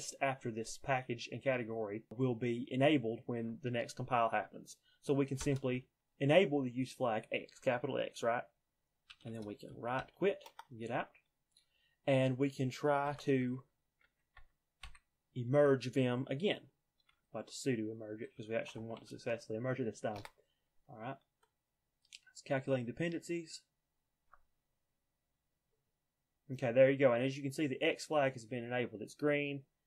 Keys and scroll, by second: 5.4 x, 9.1-10.5 typing, 13.1 ctrl+l, 13.6 Up, 14.1 Up, 14.4 Up, 14.9 Up, 17.2 Left, 17.8-18.2 Left, 18.3-19.5 typing.